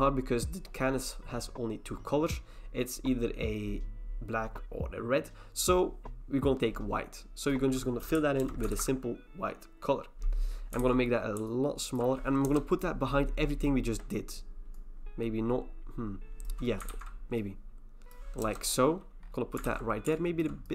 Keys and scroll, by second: 8.4 alt+BackSpace, 8.7 ctrl+d, 10.8 ctrl+t, 12.4 Return, 16.9 ctrl+t, 18.4 Return, 19.6 ctrl+t.